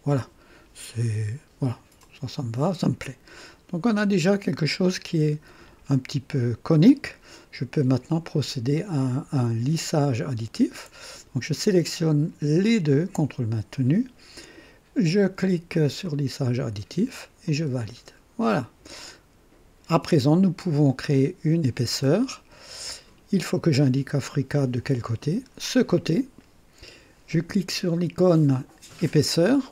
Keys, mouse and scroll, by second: 2.0 click, 3.0-5.5 drag, 12.7 ctrl+click, 16.0 click, 17.4 click, 18.5-21.2 drag, 25.1 click.